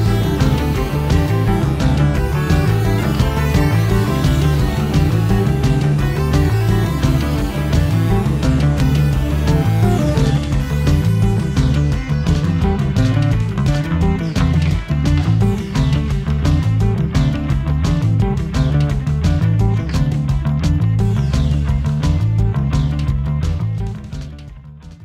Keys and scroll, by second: 0.0 i, 0.8 v, 10.6 a, 12.7 super+j, 17.5 v, 18.1 i, 18.9 v.